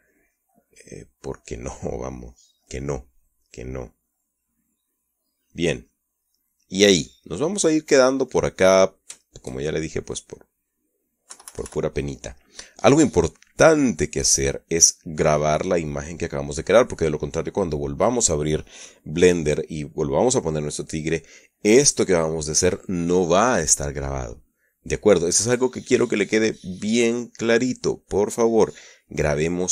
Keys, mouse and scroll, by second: 0.4-1.9 shift+drag, 1.5 shift+middle click, 2.0-6.5 shift+drag, 6.6-7.0 drag, 7.2-9.8 middle drag, 10.0 shift+middle click, 10.4-10.9 shift+middle drag, 11.0 shift+middle click, 12.1 KP_Subtract, 13.2-13.8 middle drag, 13.8 middle click, 18.1-19.1 middle drag, 22.6-23.8 middle drag.